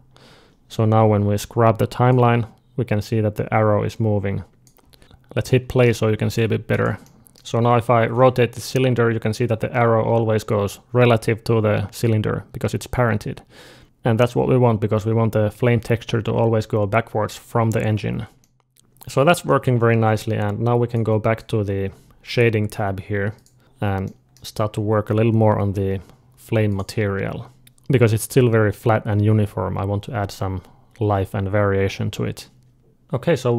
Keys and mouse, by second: 2.0-3.9 drag, 5.0 alt+a, 5.0 click, 5.0 space, 5.2 middle click, 6.1 space, 6.6 middle click, 7.1-8.6 drag, 7.4-8.6 right drag, 7.9 r, 8.6 middle click, 18.3 middle click, 18.7-33.0 drag.